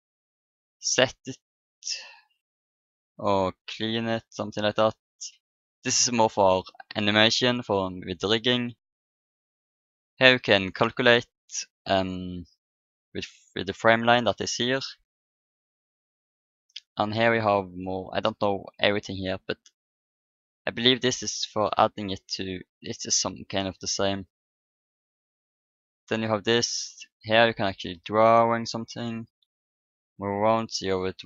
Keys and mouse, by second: 0.6-2.4 drag, 4.0-5.5 drag, 9.0-10.9 drag, 16.8-18.9 drag, 21.4-28.9 drag, 29.4-31.2 middle drag.